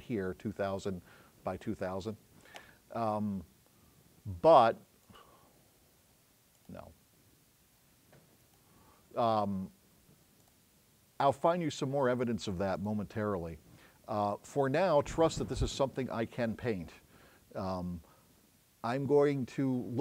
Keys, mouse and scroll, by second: 6.6 click, 8.5 click, 10.5-11.5 drag.